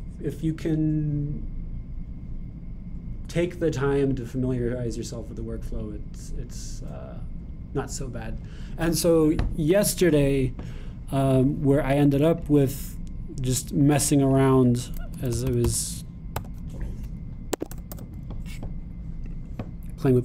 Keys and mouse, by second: 13.4-20.2 drag.